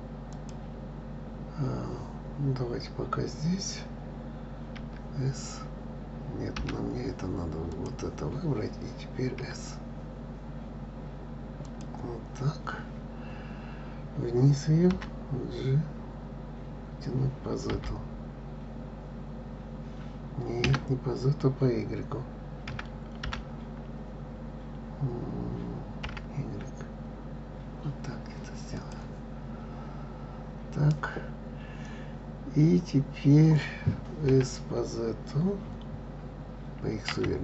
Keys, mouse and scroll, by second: 4.8 s, 7.7 click, 9.4 s, 14.9 g, 22.6 y, 23.2 g, 29.9-31.9 scroll up 1, 34.3 s.